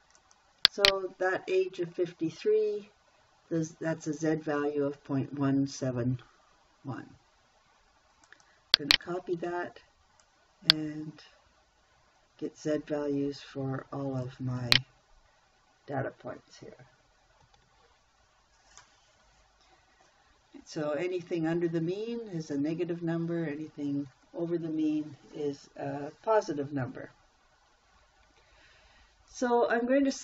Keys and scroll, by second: 9.8 ctrl+c, 17.9 ctrl+v.